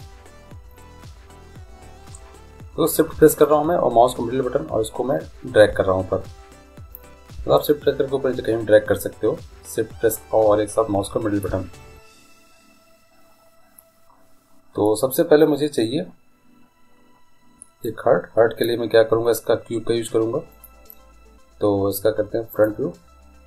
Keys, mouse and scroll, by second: 0.7-4.9 middle drag, 17.8-19.6 drag.